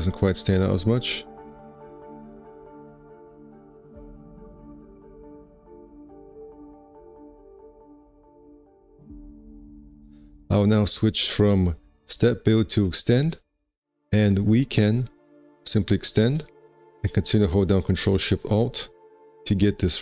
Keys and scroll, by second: 7.6 1, 10.3 ctrl+2.